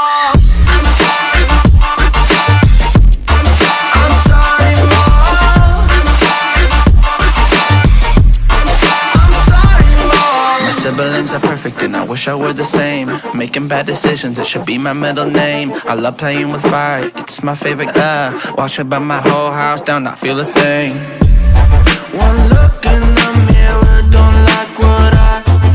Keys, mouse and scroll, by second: 0.0 ctrl+space, 0.2 click, 0.8 ctrl+alt+scroll down 1, 1.1 ctrl+space, 1.1 click, 3.2 ctrl+super+scroll down 1, 3.5 space, 3.6 click, 3.7 click, 4.2 ctrl+alt+scroll down 1, 4.5 space, 4.7-8.0 drag, 8.0-9.8 alt+drag, 13.3 shift+click, 17.9 ctrl+alt+scroll up 1, 18.4 ctrl+space, 18.5 click, 23.8 ctrl+alt+scroll up 1, 24.3 ctrl+space, 24.5 click, 25.5 ctrl+alt+scroll down 1.